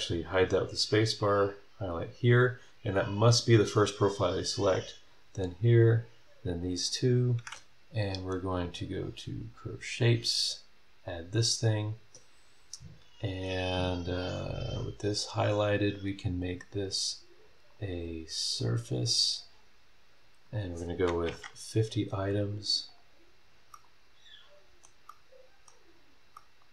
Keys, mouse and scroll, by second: 1.5 click, 4.8 ctrl+click, 5.7 ctrl+click, 6.9 ctrl+click, 7.1 ctrl+middle click, 8.0 click, 9.3 click, 9.6 middle click, 10.2 click, 11.1 scroll down 1, 11.4 scroll up 1, 14.2 click, 14.4 scroll down 1, 15.2 click, 17.7 click, 18.6 click, 20.4 click, 21.0-21.8 typing, 22.9 click, 23.5 scroll down 1, 23.7-25.0 middle drag, 23.8-25.0 drag, 25.1 middle click, 26.3-26.7 middle drag, 26.6-26.7 right drag.